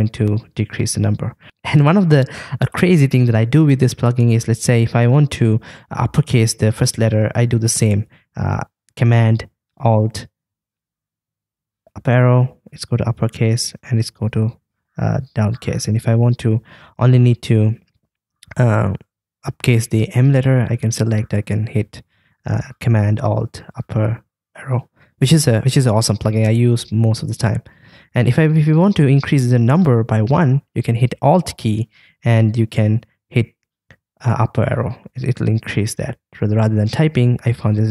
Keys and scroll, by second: 1.4 alt+super+Down, 11.6 alt+super+Up, 14.2 alt+super+Down, 21.4 alt+super+Up, 34.3 alt+Up, 35.0 alt+Up, 36.8 alt+Down, 37.4 alt+Down.